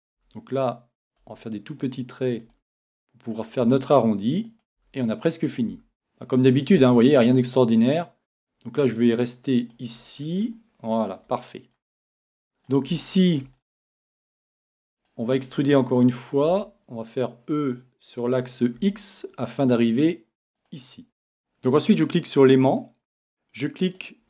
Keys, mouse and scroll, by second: 0.1-2.1 drag, 0.2 e, 1.2 e, 2.5 e, 3.6-8.4 drag, 3.6 e, 4.9 e, 5.9 e, 6.9 e, 9.7-11.5 drag, 10.2 middle click, 10.3 middle click, 10.5 middle click, 11.4-15.0 middle drag, 15.0-16.9 right drag, 16.5 e, 20.7-24.2 drag.